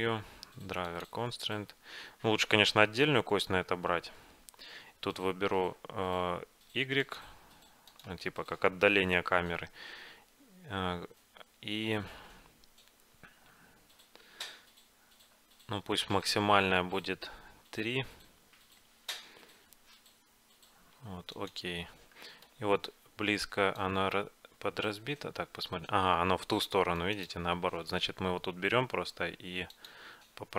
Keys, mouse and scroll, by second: 22.2-23.9 middle drag, 23.9-26.5 drag, 29.8-30.5 drag.